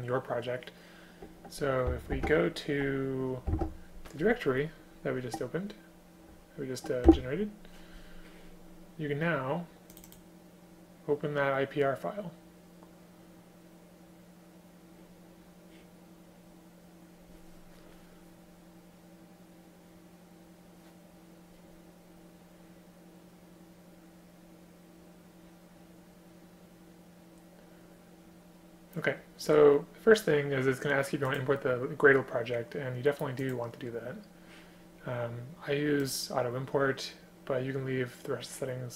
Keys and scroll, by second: 2.1 super+r, 3.5 ctrl+v, 7.1 Return.